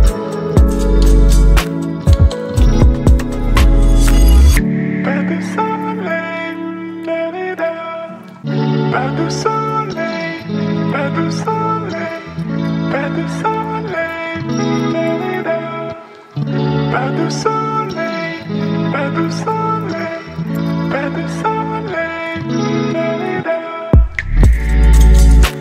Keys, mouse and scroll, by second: 4.5 Left, 6.3 ctrl+t, 9.0 ctrl+t, 9.1-13.4 shift+drag, 17.0-21.3 alt+drag, 21.3-25.4 drag.